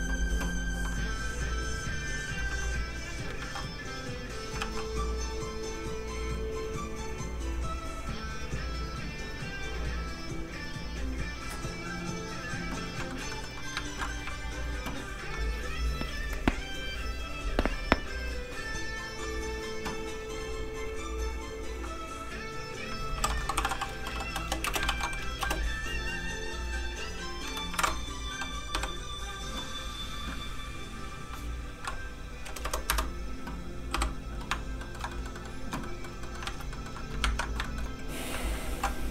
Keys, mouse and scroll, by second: 1.2 click, 2.5 shift+d, 3.0 click, 3.4 ctrl+z, 4.0 z, 4.1 click, 4.6 shift+d, 5.2 d, 5.6 click, 13.1 shift+middle click, 13.7 middle click, 13.9 ctrl+s, 19.3 click, 23.1-24.9 typing, 25.4 Return, 26.9 click, 27.7 KP_1, 27.8 Return, 28.7 i, 31.0 click, 32.6 KP_0, 32.9 Return, 33.9 i, 34.8 shift+middle click, 35.1 middle click, 35.2 middle click, 35.8 middle click, 36.2 shift+middle click, 36.4 alt+shift+z, 36.8 middle click, 37.2 ctrl+Tab, 37.6 shift+middle click, 38.2 scroll down 1, 38.7 alt+m.